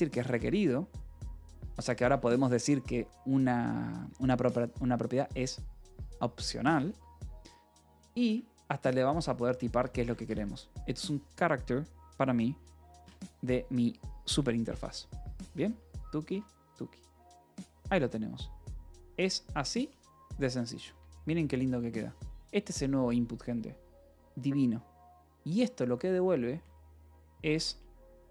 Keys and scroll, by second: 0.0-2.2 typing, 3.4 Escape, 6.8 a, 8.5-10.9 typing, 12.9 Return, 15.3 BackSpace, 16.4-17.4 typing, 18.1 ctrl+s, 18.4 g, 20.4 shift+g, 20.7 k, 20.9 Escape, 23.2 h, 25.6 l, 26.9-27.9 typing.